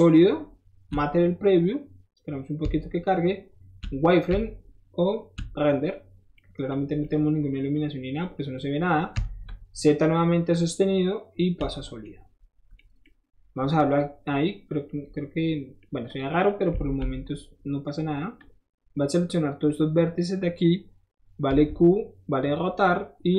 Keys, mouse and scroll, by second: 6.0 middle click, 6.3 middle click, 6.8 middle click, 7.0-8.1 middle drag, 8.2 middle click, 8.6 middle click, 9.3 z, 14.1 middle click, 15.0 middle click, 16.1 click, 16.8 alt+z, 17.9 right click, 17.9 middle click, 18.0 right click, 18.4-19.7 drag, 19.7-20.2 right drag, 20.2 middle click, 20.2-21.6 right drag, 22.4 click.